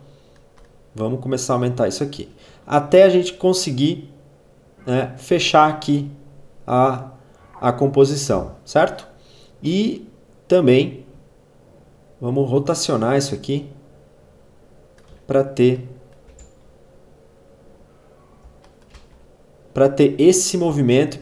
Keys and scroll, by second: 16.2 space, 18.2 space, 20.5 space.